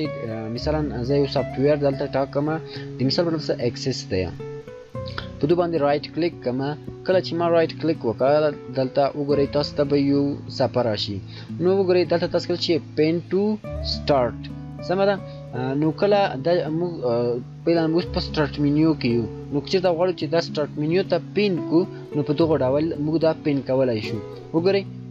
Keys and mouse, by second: 0.9 shift+click, 4.8 shift+right click, 24.3 click.